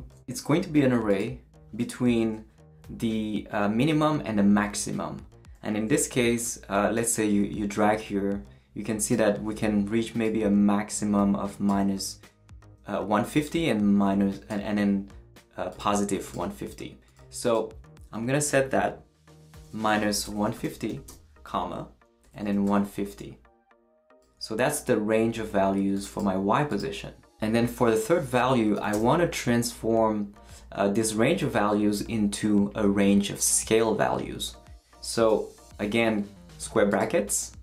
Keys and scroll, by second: 19.6-23.2 typing, 28.7 ,, 28.9 space, 35.3 [.